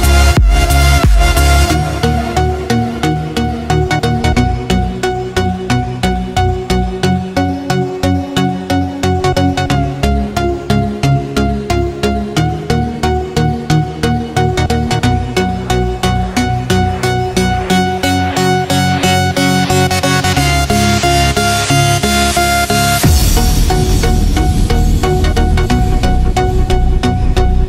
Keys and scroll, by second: 1.6 space, 2.1 space, 5.5 space, 6.0 space, 6.8 v, 8.4 Tab, 9.4 typing, 20.2 space, 20.7 space, 20.8 space.